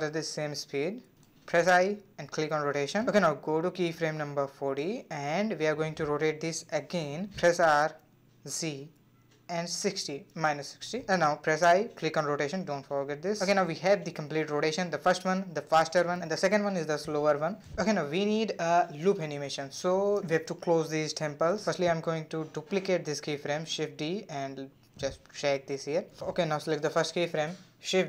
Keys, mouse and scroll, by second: 3.2-5.9 drag, 7.0 r, 13.2-14.5 drag, 14.5-15.2 middle drag, 15.2 space, 17.3 space, 19.6 click, 20.5 click, 21.4 shift+d, 23.2-26.0 drag, 27.0 shift+d.